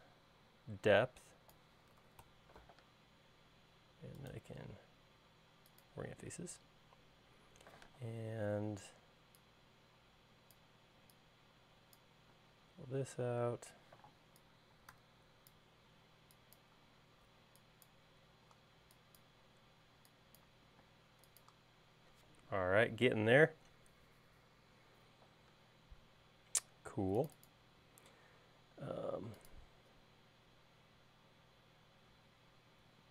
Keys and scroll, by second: 2.7-3.5 typing, 8.8 p, 11.8 e, 14.0 p, 16.0 e, 21.0 space, 28.8 l.